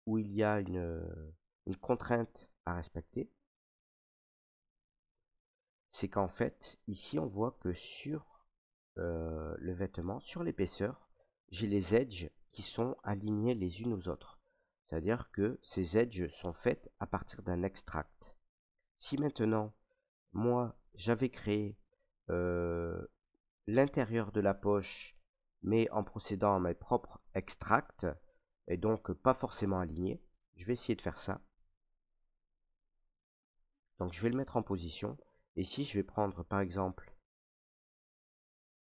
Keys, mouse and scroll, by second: 0.1 right click, 1.1 alt+r, 1.6 middle click, 1.7 middle click, 2.5 middle click, 2.9 middle click, 3.4 middle click, 3.5 middle click, 4.5 right click, 5.1 Tab, 6.4 middle click, 8.4 middle click, 9.8 middle click, 9.9 scroll, 11.1 middle click, 12.8 middle click, 14.6-20.1 middle drag, 20.9 middle click, 21.3 middle click, 21.3 middle click, 22.0 middle click, 23.2 shift+middle click, 24.1 middle click, 28.0 middle click, 28.4 middle click, 29.2 shift+middle click, 30.3 middle click, 30.6 Tab, 31.7 right click, 32.7 middle click, 33.4 r, 34.4 click, 35.0 middle click, 36.5 middle click, 37.5 right click, 38.1 Tab.